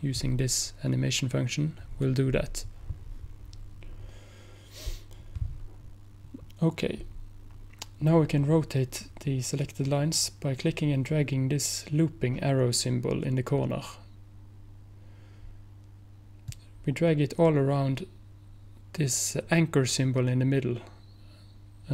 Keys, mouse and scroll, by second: 16.6-21.9 drag.